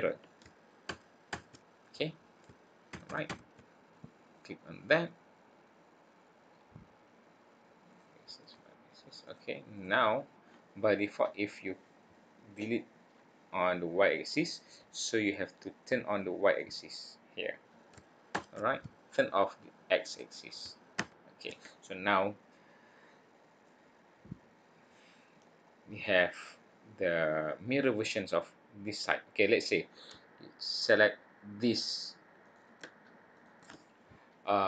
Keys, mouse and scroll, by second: 7.9 click, 8.4 click, 9.2 click, 9.7 click, 16.4 click, 21.1 click, 23.6 middle click, 25.8 click, 26.7-27.4 scroll down 2, 27.1-27.7 scroll up 3, 27.7-29.5 scroll down 1, 29.5 scroll down 1, 30.7 click, 32.4 click, 33.3 click.